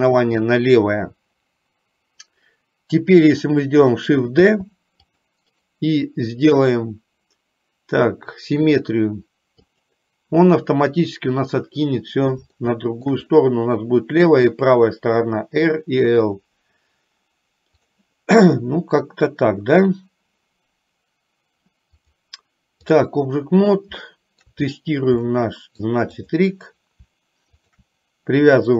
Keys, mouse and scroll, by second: 4.6 shift+d, 7.6-12.6 right drag, 12.7 shift+middle click, 22.1-23.2 drag, 24.3 shift+middle click, 25.5 middle click, 26.5 click.